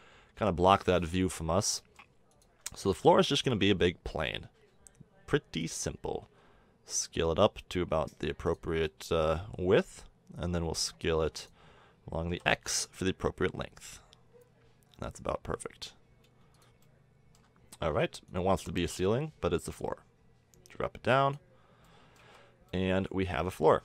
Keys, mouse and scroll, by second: 0.4 KP_7, 0.8-1.9 middle drag, 2.8 shift+a, 6.2 s, 9.8 click, 12.3 s, 16.8-17.3 middle drag, 22.1 middle click, 22.2 a.